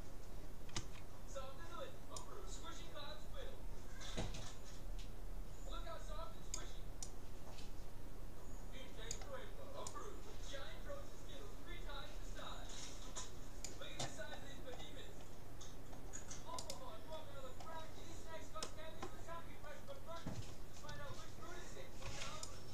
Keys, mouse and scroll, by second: 0.9 c, 16.7-18.5 right drag, 17.1-22.5 middle drag, 22.1 c.